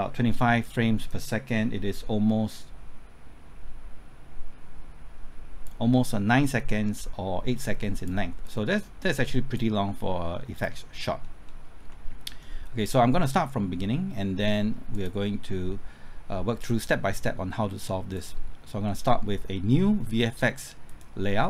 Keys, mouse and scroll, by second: 11.2 scroll down 1, 11.8 middle click, 14.9 click.